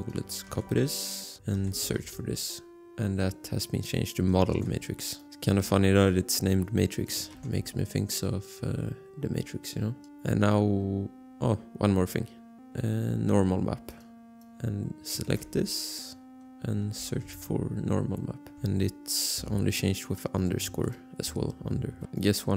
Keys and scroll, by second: 0.7 ctrl+c, 1.0 alt+Tab, 1.7 ctrl+f, 2.2 ctrl+v, 4.8 ctrl+c, 7.5 ctrl+v, 15.5 ctrl+c, 17.2 ctrl+f, 17.5 ctrl+v, 20.5 ctrl+c, 21.0 ctrl+v.